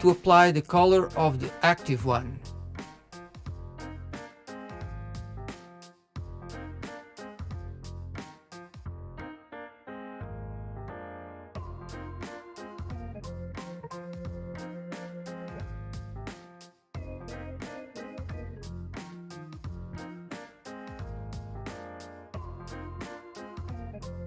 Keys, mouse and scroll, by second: 0.5 ctrl+l, 0.9-2.4 middle drag, 3.1 click, 4.0-7.4 middle drag, 7.4 shift+click, 7.6-8.0 middle drag, 8.0 shift+click, 8.2 shift+click, 8.5 shift+click, 8.7 shift+click, 9.3 shift+click, 10.2 ctrl+l, 10.3-11.0 middle drag, 11.0 click, 11.1 middle click, 11.7 shift+click, 12.1 shift+click, 12.7 shift+click, 13.1 shift+click, 13.5 shift+click, 14.1 ctrl+l, 14.3-15.0 middle drag, 15.6 click, 16.2 shift+click, 16.8 shift+middle click, 17.0 shift+click, 18.4-18.9 middle drag, 18.9 shift+click, 19.1 middle click, 19.9 shift+Left, 20.2 shift+Left, 20.4 shift+Left, 20.7 shift+Left, 21.4 middle click, 21.7 shift+Left, 21.9 middle click, 22.9 shift+click, 23.1 shift+click, 23.3 shift+click, 23.4 shift+click, 24.1 shift+click.